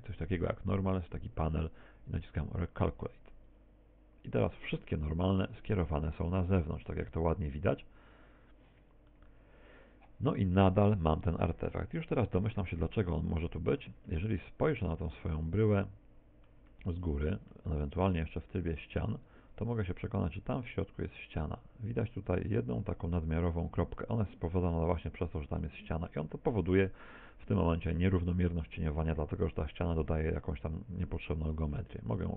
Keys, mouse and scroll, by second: 0.3 scroll up 1, 3.5 click, 6.8 click, 9.1 middle click, 10.9 Tab, 11.2 middle click, 14.3 Tab, 14.8 z, 15.2 middle click, 16.7 middle click, 17.8 ctrl+Tab, 19.1-19.7 scroll up 2, 19.7-20.1 scroll up 3, 23.7 right click, 24.3 middle click, 26.1 middle click, 27.3 z, 31.1 x.